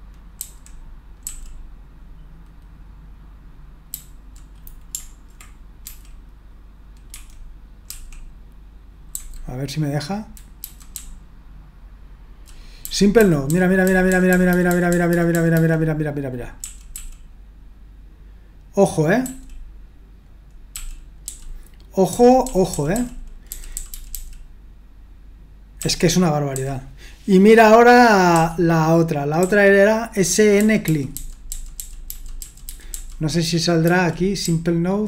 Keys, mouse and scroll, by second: 0.3 Down, 1.2 Up, 3.9 Down, 5.8 d, 7.1 d, 7.8 l, 10.6 Down, 10.9-12.4 Down, 12.8 Down, 13.5 Down, 13.8 Down, 14.0 Down, 14.5 Down, 14.7 Down, 15.1 Down, 15.3 Down, 16.6 Up, 16.9 Up, 19.2 Up, 20.7 Up, 21.2 Down, 22.1 Up, 22.4 Up, 22.7 Up, 22.9 Up, 23.5 Down, 23.7 Down, 23.9 Down, 24.1 Down, 25.8 Up, 26.5 Down, 28.3 Down, 29.4 Up, 30.0 Up, 30.6 Down, 30.9 Down, 31.1 Down, 31.5 Down, 31.7 Down, 32.0 Down, 32.4 Down, 32.7 Down, 32.9 Down, 33.8 Down, 34.4 Up.